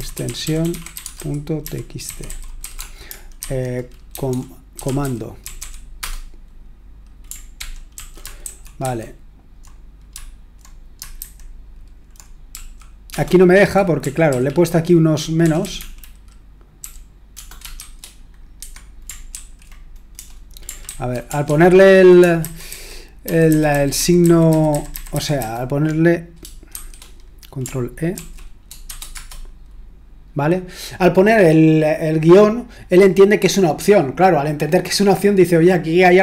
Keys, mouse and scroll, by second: 0.0-2.7 typing, 4.1-6.0 typing, 7.5 ctrl+p, 7.9 ctrl+a, 8.4 alt+f, 8.8 alt+f, 11.2 alt+b, 12.4 l, 13.9 Right, 14.2 Right, 14.4 Right, 15.0 Right, 16.7-17.7 Right, 18.6 typing, 19.3 Escape, 20.6 typing, 22.4 BackSpace, 22.4 c, 23.2 ctrl+p, 23.5 a, 28.1 alt+b, 28.8 a.